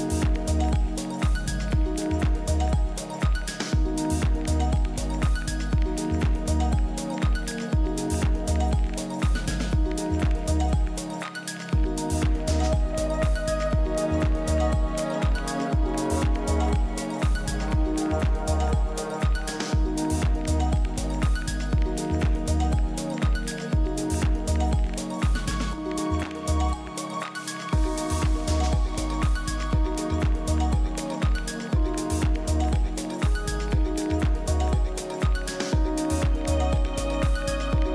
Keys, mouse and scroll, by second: 4.5-6.3 middle drag, 6.3-8.2 drag, 10.1-12.1 drag, 11.7 KP_1, 13.6 KP_3, 15.4 ctrl+KP_1, 20.6 KP_3, 22.1-24.1 middle drag, 27.0 n, 30.9 shift+a.